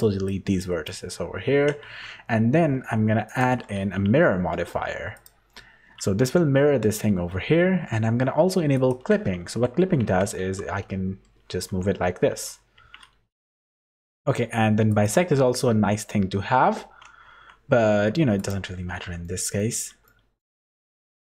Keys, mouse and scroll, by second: 0.6 click, 1.8 Tab, 3.2 click, 3.8 q, 8.7 click, 9.4 Tab, 10.0 a, 10.4 g, 12.7 Tab, 14.9 click, 17.2 Tab, 18.1 3, 18.3 click, 18.9 z, 19.2 middle click, 20.0 middle click.